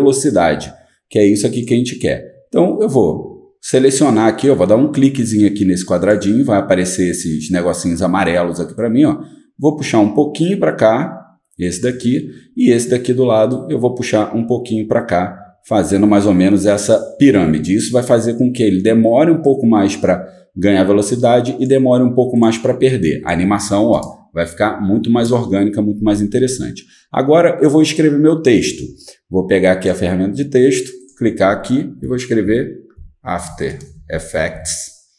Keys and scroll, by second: 32.1-35.1 typing.